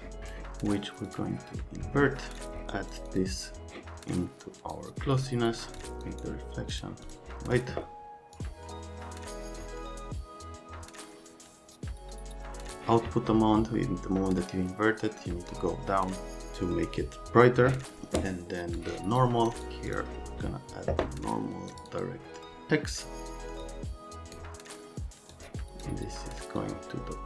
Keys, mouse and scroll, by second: 0.2 click, 1.1 click, 2.4 click, 2.9 click, 3.0 click, 3.8 click, 5.8 click, 6.0 click, 6.7 click, 7.0 click, 8.3 click, 18.7 click, 19.6 click, 19.9 click, 23.6 click, 25.3 click, 26.6 click.